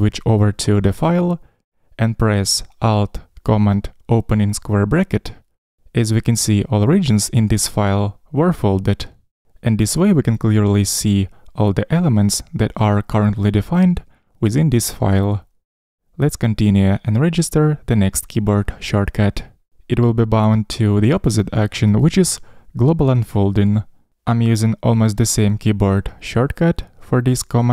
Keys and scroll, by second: 5.1 alt+super+[.